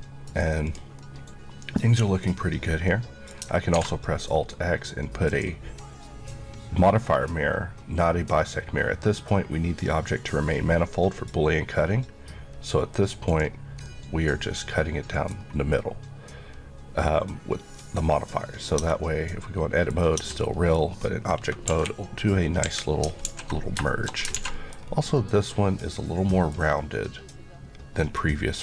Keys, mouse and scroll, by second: 0.6 click, 1.0 middle click, 2.6 scroll down 1, 2.9 middle click, 5.3 click, 13.9 middle click, 15.4 scroll up 1, 15.7 middle click, 18.8 Tab, 19.3 middle click, 20.2 middle click, 20.2 Tab, 20.4 middle click, 20.9-21.7 scroll down 1, 21.7 KP_1, 23.2 alt+KP_3, 23.3 alt+z, 23.9 shift+middle click, 24.3 alt+z, 24.5 middle click, 24.9 scroll up 1, 25.2 middle click.